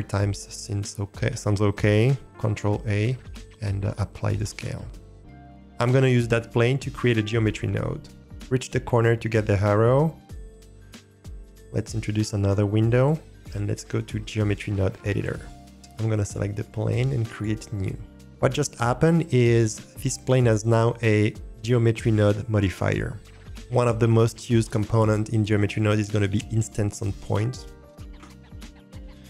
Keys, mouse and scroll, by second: 0.6-2.0 scroll down 1, 2.1 scroll down 1, 2.4 ctrl+a, 10.1-11.5 drag, 12.9-15.4 drag, 16.2 click, 17.3 click.